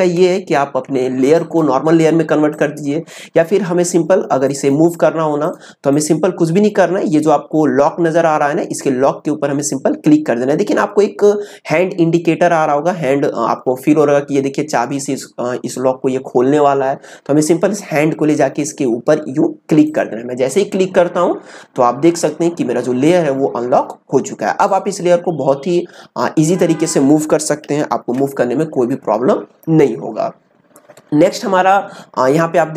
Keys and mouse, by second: 1.3 click, 19.8 click, 24.6-27.9 drag, 27.9 ctrl+z.